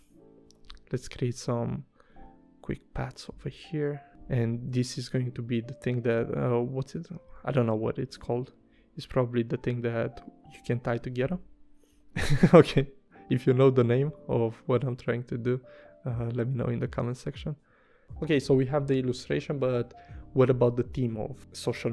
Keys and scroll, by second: 0.5 p, 4.1 v, 4.7 p, 7.4 super+z, 10.5 v, 11.9 p, 18.0 v, 21.7 BackSpace.